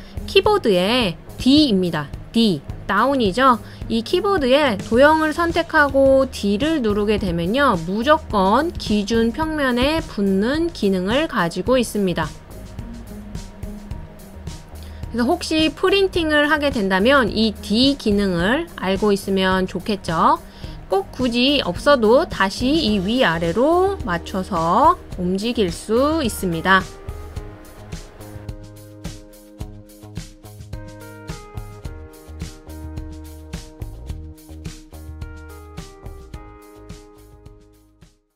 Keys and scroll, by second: 2.2 d, 6.7 d, 8.1 d, 9.6 d, 10.6 d, 17.1 typing.